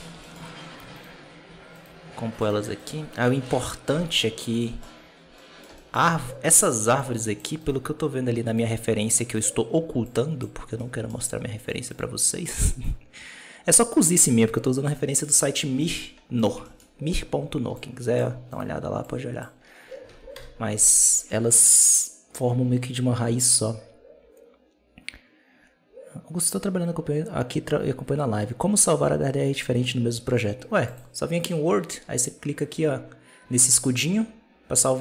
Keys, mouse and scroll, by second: 0.1 shift+middle drag, 0.9-2.3 shift+right drag, 2.7 right click, 3.4 KP_Decimal, 4.1 middle drag, 4.4-5.2 scroll up 5, 4.5-4.8 shift+middle drag, 5.2-5.8 middle drag, 5.8 scroll up 1, 6.1-6.9 middle drag, 6.9-7.5 drag, 7.5 scroll up 1, 7.5 right click, 8.4 click, 9.3 right click, 9.9 click, 10.6-11.5 middle drag, 11.5-11.8 right drag, 12.1-12.7 middle drag, 12.7-14.5 drag, 14.5 scroll down 2, 14.7 middle click, 15.4-15.7 scroll down 1, 15.7 shift+middle click, 15.9-16.3 scroll up 1, 16.3 right click, 16.5 shift+middle click, 16.7-17.6 scroll up 3, 17.6-18.4 drag, 18.4-18.9 right drag, 18.9 click, 19.4-20.0 scroll down 6, 20.0 alt+a, 20.2 KP_0, 30.7 click.